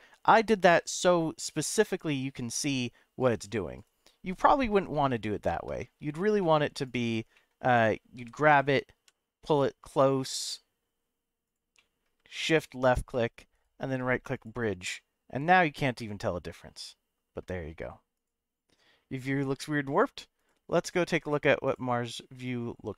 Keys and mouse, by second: 0.4 g, 0.7 x, 1.6 y, 3.2 right click, 3.7 right click, 4.5 middle click, 5.1 ctrl+z, 5.8 middle click, 6.4 middle click, 6.8 click, 7.3 middle click, 8.2 g, 8.4 x, 8.9 y, 11.4 click, 11.7 middle click, 12.8 shift+click, 13.5 right click, 14.9-17.4 middle drag.